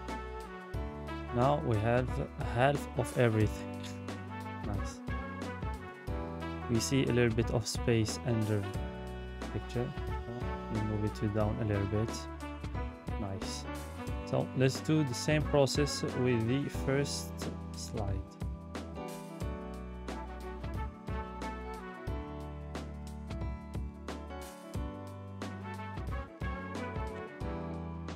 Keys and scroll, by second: 5.1 Escape, 7.6 Down, 7.9 Down, 8.2 Down, 11.3 Escape, 23.0 ctrl+d.